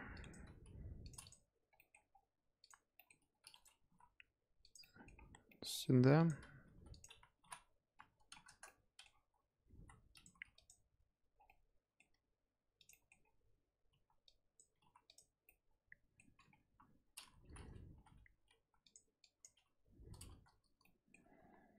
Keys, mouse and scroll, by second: 0.1 drag, 0.5 g, 1.2 click, 1.7 middle drag, 1.9 scroll up 1, 2.0 scroll down 3, 2.6 click, 2.9 scroll up 1, 2.9-3.4 middle drag, 3.4 shift+d, 3.7 g, 4.8 middle drag, 5.0 scroll down 1, 5.1-5.4 scroll up 1, 5.4-5.9 middle drag, 5.9 g, 6.5 g, 7.1 scroll up 1, 7.3 r, 8.6-9.0 middle drag, 9.0-9.6 scroll up 1, 9.6 g, 10.2 g, 11.1 scroll up 1, 11.3 scroll down 3, 11.4-12.0 middle drag, 12.0 g, 12.9-13.2 middle drag, 13.2-13.8 scroll up 3, 13.8 g, 14.7 g, 15.4-16.2 middle drag, 16.2-16.6 scroll down 1, 16.6 KP_1, 17.0-17.3 scroll up 1, 17.3 z, 17.8 g, 19.2 click, 20.8-21.3 middle drag, 21.3 scroll down 1, 21.3 z.